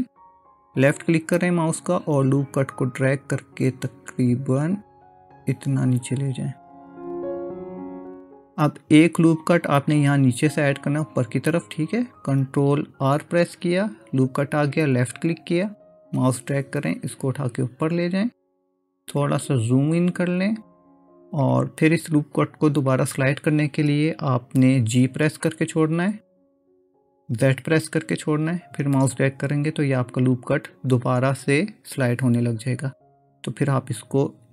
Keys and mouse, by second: 13.1 ctrl+r, 26.4 g.